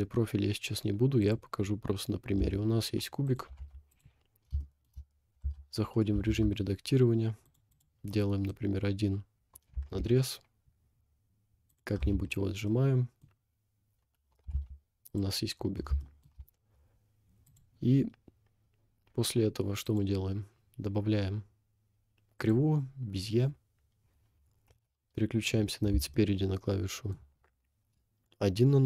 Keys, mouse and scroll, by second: 2.6 s, 3.6 g, 4.1 scroll up 1, 4.6 shift+middle click, 5.0 scroll up 3, 5.4 Tab, 6.3 ctrl+r, 8.1 middle click, 9.7 s, 12.0 Tab, 12.4 scroll down 1, 12.7-13.3 middle drag, 13.4 scroll down 2, 14.6 g, 15.4 scroll down 1, 16.0 shift+middle drag, 17.5 click, 19.9 click, 23.4-24.7 scroll down 2, 24.7 KP_1, 25.5-25.9 scroll up 3, 26.1-27.3 shift+middle drag.